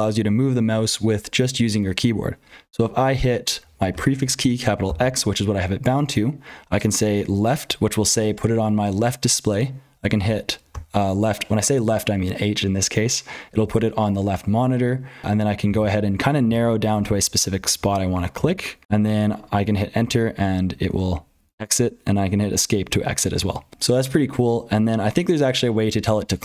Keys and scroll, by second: 0.0-26.4 typing, 3.9 ctrl+z, 18.8 Return, 20.8 Escape.